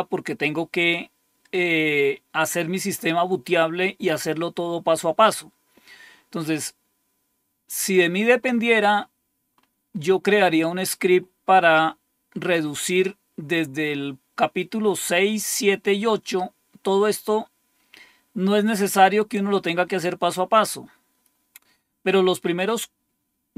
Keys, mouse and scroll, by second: 6.3-7.1 scroll up 2, 7.7-8.9 scroll up 3, 8.9-13.6 scroll up 3, 15.2-16.0 scroll down 2, 17.2-18.2 scroll down 2, 18.2-22.7 scroll up 4.